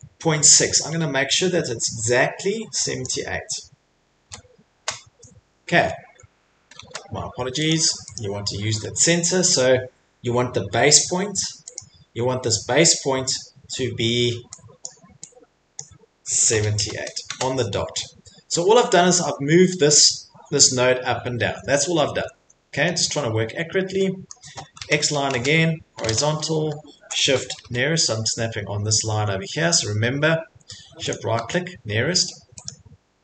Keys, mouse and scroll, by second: 3.0 click, 4.2 Delete, 4.7 Return, 6.8 ctrl+z, 7.7 click, 8.2 click, 11.7 click, 14.8 click, 15.8 click, 16.5 typing, 17.3 Return, 21.6 middle click, 22.0 middle click, 22.1 Escape, 22.4 Escape, 22.5 middle click, 22.9 middle click, 23.0 middle click, 23.5 middle click, 24.3 middle click, 24.8-26.0 typing, 27.2 shift+right click, 27.6 n, 32.7 click.